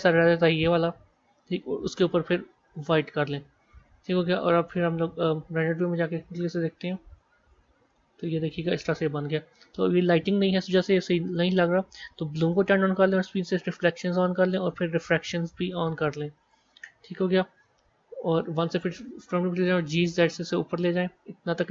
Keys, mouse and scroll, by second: 1.9 click, 2.6 click, 7.0 Tab, 7.8-9.6 middle drag, 9.6-11.1 scroll down 3, 11.1 click, 12.5 click, 13.3 click, 14.2-15.5 drag, 16.5 click, 17.4 KP_1, 18.5 KP_1, 19.8 g.